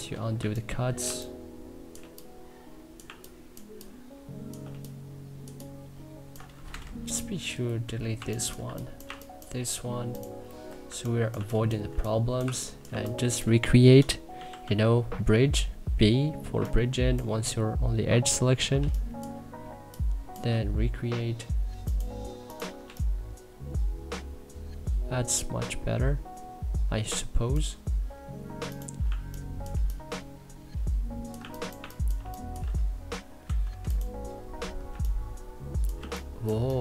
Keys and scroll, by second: 0.0 3, 2.7 2, 4.3 3, 6.3 c, 7.5 Delete, 7.6-9.2 typing, 10.4 Delete, 10.5 3, 11.0 2, 12.1 1, 12.5 2, 13.9 x, 14.3 b, 18.4 3, 22.5 3, 31.4 1, 31.8 3, 33.1 c, 34.5 3, 36.7 1.